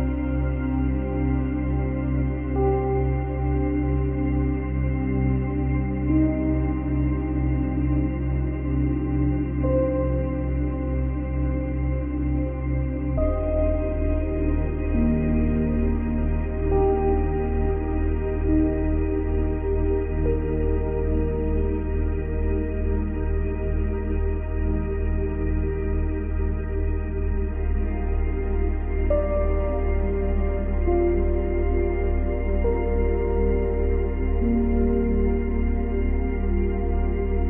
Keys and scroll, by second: 19.7 space, 21.4 space, 29.8 space, 31.4 space, 35.0 space.